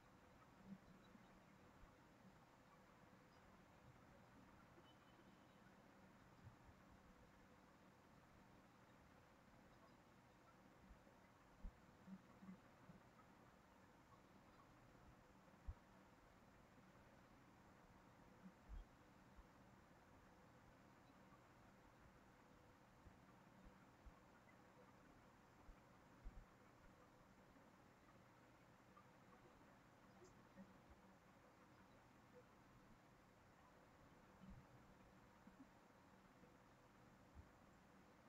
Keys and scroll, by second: 14.9 ctrl+c, 15.1 ctrl+v, 17.6 ctrl+z, 19.7 ctrl+c, 31.0 ctrl+v.